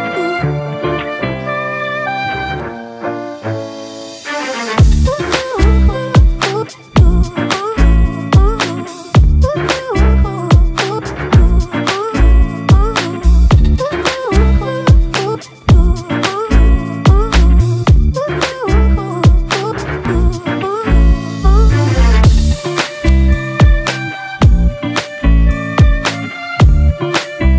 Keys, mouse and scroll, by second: 0.7 ], 0.9 ], 4.4 right click, 6.1 [, 6.2 [, 6.9 double click.